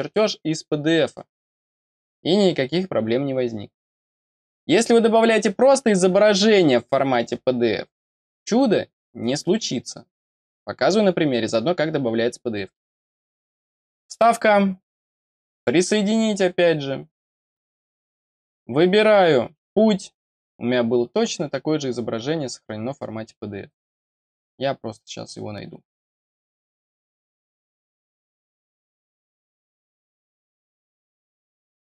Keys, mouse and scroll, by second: 13.9 click, 15.5 click, 19.4 click, 23.8-26.2 scroll down 2, 26.2-27.2 scroll down 1, 27.2 click, 28.8 click, 30.1 click, 31.1 click, 31.3 click.